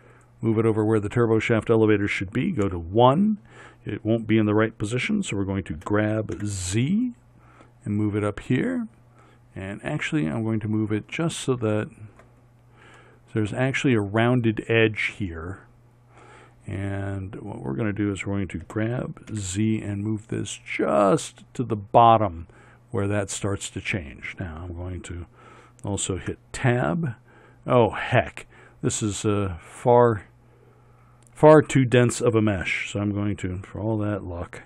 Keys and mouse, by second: 2.7 KP_1, 5.8 g, 18.7 g, 26.3 Tab.